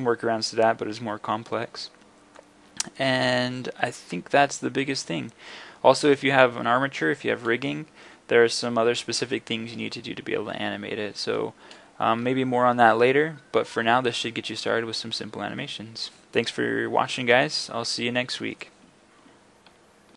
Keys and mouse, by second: 2.4-3.5 middle drag, 3.9-4.3 middle drag, 4.3 middle click, 5.1 middle drag, 5.5 middle click.